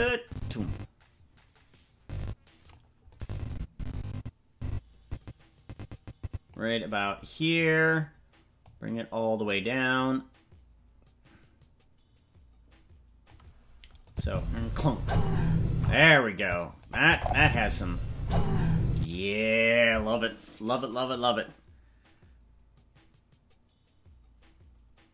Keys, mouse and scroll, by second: 3.1-6.6 drag, 8.6-13.3 drag, 14.1 click, 14.2 space, 15.8 space, 16.4 click, 16.8 click, 17.1 space, 18.9 space.